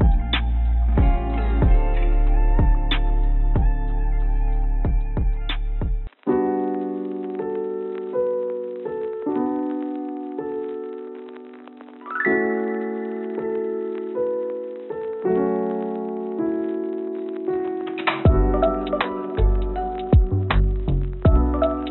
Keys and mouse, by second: 2.1 s, 6.7 s, 11.6 s, 14.2 s.